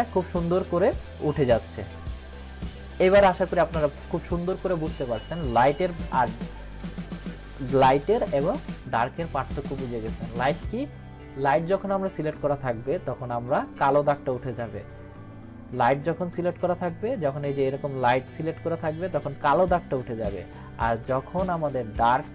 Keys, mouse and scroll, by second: 2.9 click, 3.8 ctrl+-, 5.7 click, 9.8 click, 17.5 click, 20.9 click.